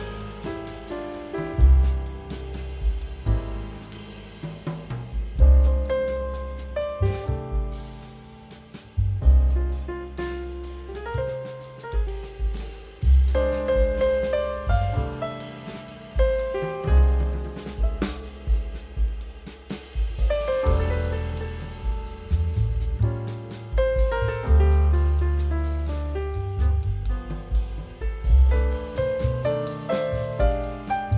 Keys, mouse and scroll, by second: 0.0-0.7 typing, 3.7 shift+click, 4.2 typing, 5.0 double click, 5.1 right click, 6.5 double click, 6.8 shift+right click, 8.3 shift+click, 8.4-9.2 typing, 9.9 shift+click, 10.1 shift+right click, 11.1 double click, 14.1 shift+click, 14.3 typing, 14.9 double click, 15.2 scroll up 1, 27.3 shift+right click, 30.7 shift+click.